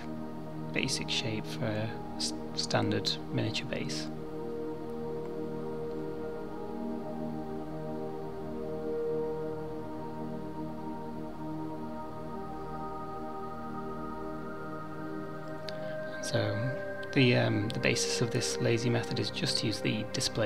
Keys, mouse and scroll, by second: 0.6 alt+shift+click, 1.2 middle click, 2.4 alt+shift+click, 4.4 middle click, 5.9 ctrl+b, 10.7 middle click, 13.4 Tab, 13.6 middle click, 14.3 Tab, 15.5 alt+click, 17.0 ctrl+b.